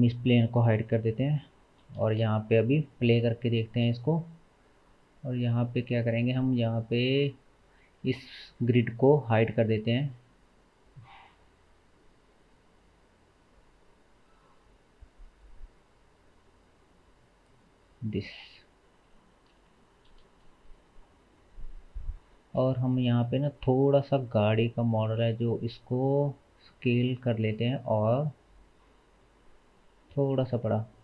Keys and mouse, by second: 0.1 click, 1.0 h, 2.1 space, 3.7 space, 5.2-19.1 drag, 19.1-23.2 shift+middle drag, 20.3 space, 22.4 space, 23.2 click, 23.3-31.0 middle drag, 24.5 s, 29.9 g.